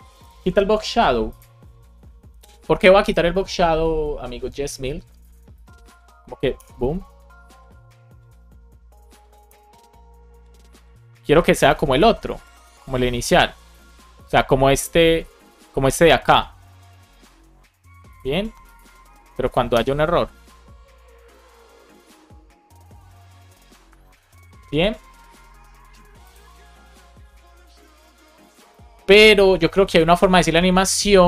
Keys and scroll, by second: 6.5 Return, 9.4 Return, 11.6 Return, 18.9 BackSpace, 19.7 Return.